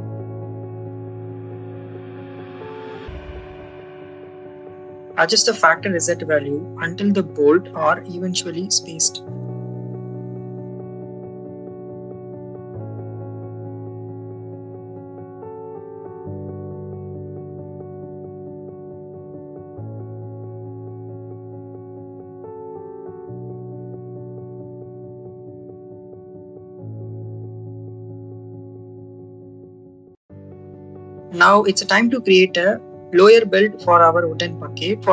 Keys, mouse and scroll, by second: 2.8 shift+click, 4.8 click, 5.5 click, 7.1-9.8 drag, 11.5 click, 12.2 click, 12.5 click, 13.0 shift+click, 16.6 click, 17.0 Tab, 18.9 middle click, 20.7 click, 21.0 Tab, 21.8 middle click, 23.7 click, 24.3 Tab, 24.8 click, 24.9 click, 25.1 click, 25.8-27.3 drag, 27.7 click, 28.8 click, 29.5-31.8 drag, 32.4 click.